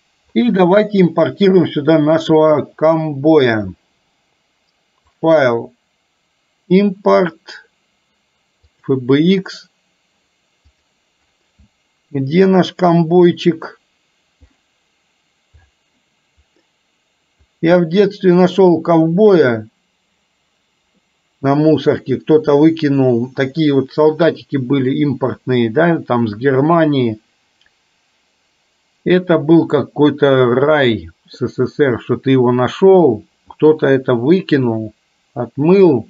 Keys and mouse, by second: 0.9-1.4 middle drag, 5.1-9.2 drag.